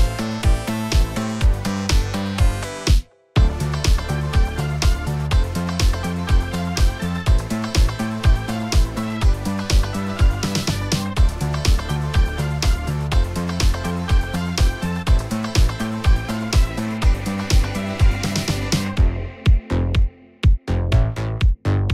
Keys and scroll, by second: 17.5 f.